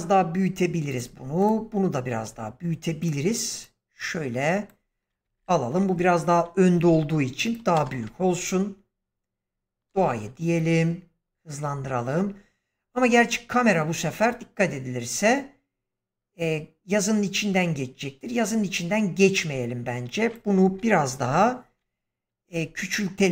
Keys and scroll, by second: 5.3 shift+Left, 6.8 s, 7.7 space, 21.1 shift+Left, 22.4 s.